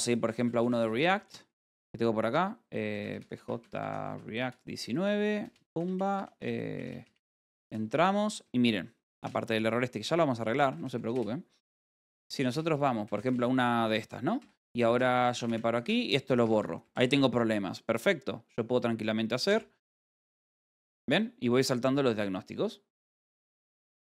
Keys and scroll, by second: 0.7-1.4 typing, 6.8-9.0 typing, 11.3-12.4 typing, 15.0 f, 18.8-20.6 typing.